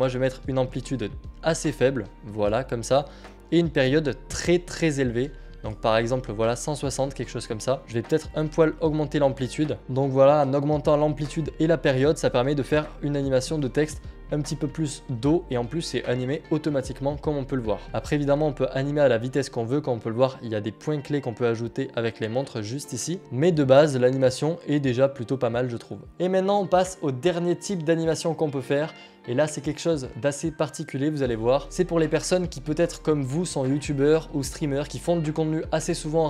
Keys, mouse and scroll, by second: 0.4 click, 2.4 click, 7.8 click, 9.8 click, 9.9 click, 13.3 click, 15.0 click, 23.2 F4.